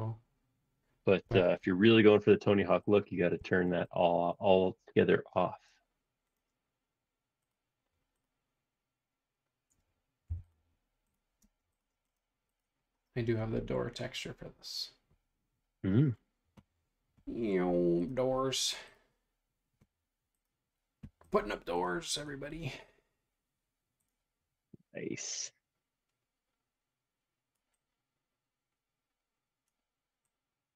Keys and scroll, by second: 10.3 p, 11.4 space.